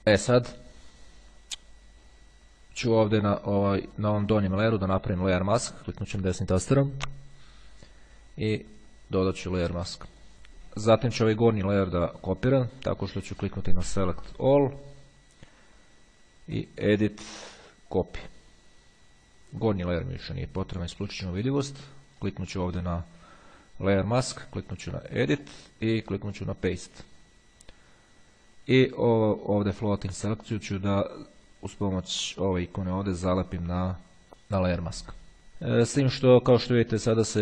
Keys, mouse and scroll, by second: 2.6-3.7 drag, 3.9 click, 5.1 click, 9.3 click, 11.1-12.4 drag, 13.7 click, 14.6 click, 16.8 click, 18.0 click, 20.0 click, 22.4 click, 25.6 click, 26.8 click, 32.9 click.